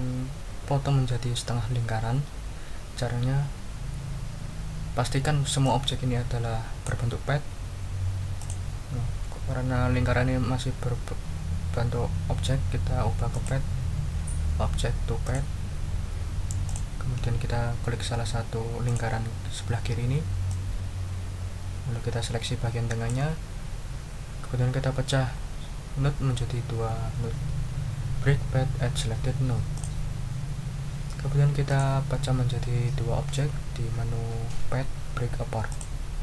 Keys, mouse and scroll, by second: 5.6-7.0 drag, 8.4 click, 13.3 click, 15.2 click, 16.6 click, 18.8 click, 20.5-23.2 drag, 29.7 click, 31.7 click, 35.7 click.